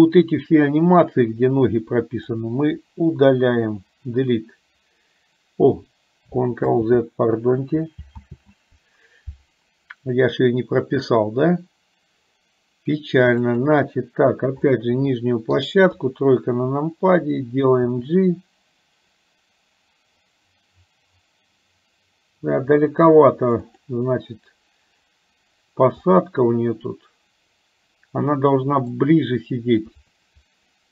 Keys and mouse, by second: 0.0-2.4 drag, 3.8 Delete, 6.9 ctrl+z, 13.7 click, 14.8 middle click, 15.9 KP_3, 18.2 g, 26.2-29.0 middle drag, 29.9 KP_3.